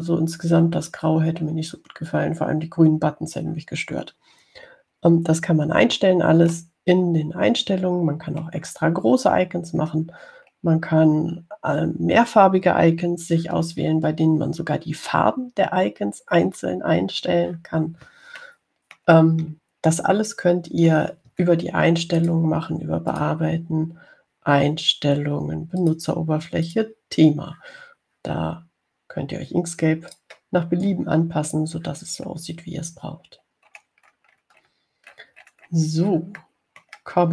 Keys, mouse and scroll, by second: 7.8 middle click, 8.1 click, 8.1 middle click, 8.3-9.7 drag, 8.4 middle click, 9.4 middle click, 9.7 middle click, 10.8-11.1 scroll down 2, 11.4 scroll down 2, 19.7 click, 20.8-21.2 ctrl+scroll down 3, 22.3 ctrl+scroll up 2, 23.4 click, 24.3 click, 27.0 click, 27.9 click, 31.4 click, 34.7-35.7 scroll down 3, 37.1-37.3 scroll down 1.